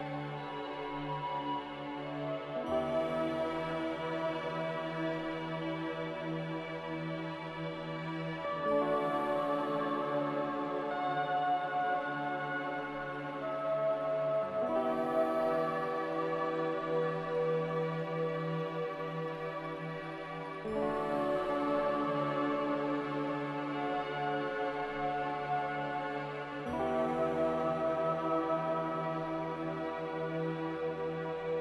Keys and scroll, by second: 3.0 Delete, 16.1 ctrl+z, 17.4-18.2 typing, 20.6 z, 22.2 b, 25.0 z, 26.0 x, 28.0-28.7 typing, 31.2 Delete, 31.2 z.